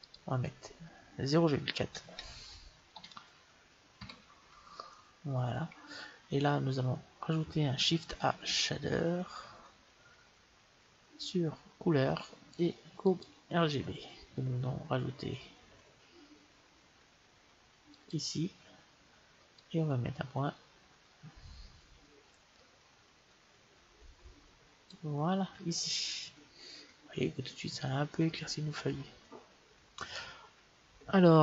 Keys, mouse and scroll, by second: 0.2-2.0 drag, 8.4 shift+a, 18.1-21.6 drag.